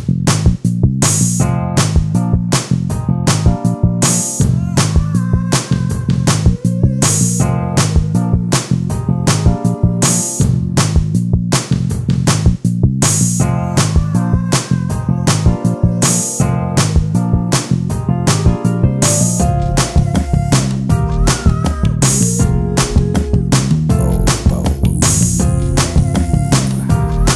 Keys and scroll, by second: 4.9 space, 8.5 ctrl+space.